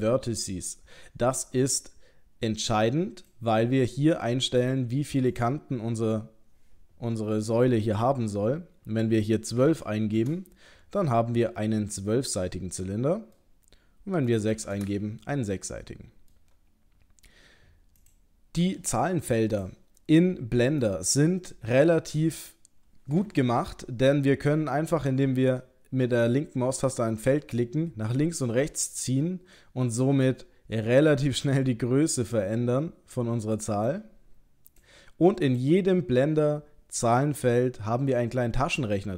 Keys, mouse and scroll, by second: 1.7 click, 5.3 click, 11.6 middle click, 14.3 click, 15.6 middle click, 18.0 click, 20.8 click, 27.3 click, 35.5 click.